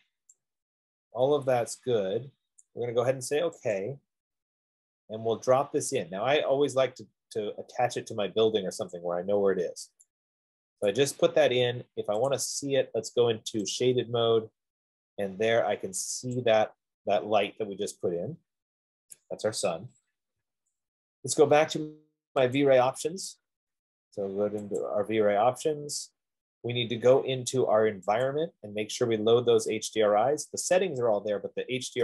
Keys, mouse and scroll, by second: 2.8 click, 4.3 click, 9.3 click, 11.3 right click, 12.7 click, 14.0 click, 15.2 scroll, 15.5 middle click, 15.6 middle click, 15.8 middle click, 16.8 click, 20.8 Escape, 23.5 click, 25.1 click, 28.6 click.